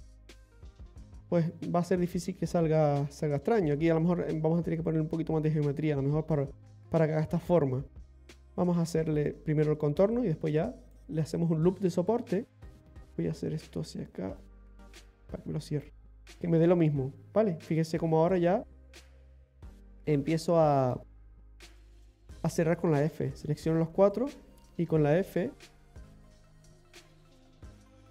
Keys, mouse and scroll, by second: 1.0 middle click, 8.3 click, 10.1 click, 11.2-11.8 scroll down 1, 11.8 middle click, 11.8 scroll down 1, 12.8 ctrl+click, 12.8 right click, 15.0 g, 17.8 scroll up 1, 18.8 right click, 19.5 shift+right click, 20.0 right click, 20.6 shift+right click, 21.8 f, 22.5 right click, 23.1 shift+right click, 23.5 shift+right click, 24.0 right click, 25.0 f, 26.0 right click, 26.8 shift+right click, 27.6 right click.